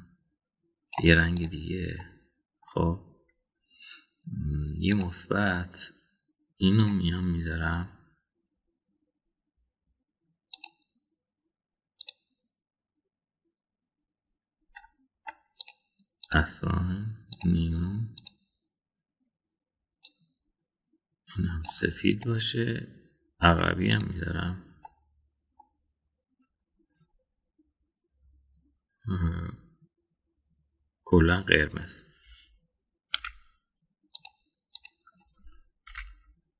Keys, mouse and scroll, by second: 2.3 click, 3.0 middle click, 6.0 click, 16.6 click, 17.2 click, 18.4 drag, 19.1 click, 23.2-24.5 middle drag, 24.9 click, 25.8 middle click, 34.2 a, 35.2 click, 35.7 click.